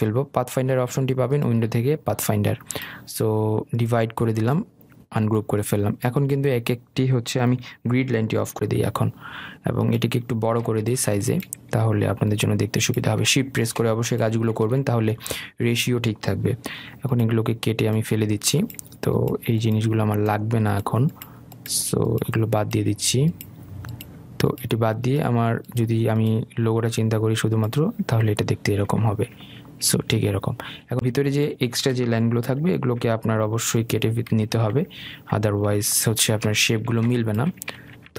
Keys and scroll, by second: 9.0 ctrl+', 17.3 Delete, 33.0 Delete.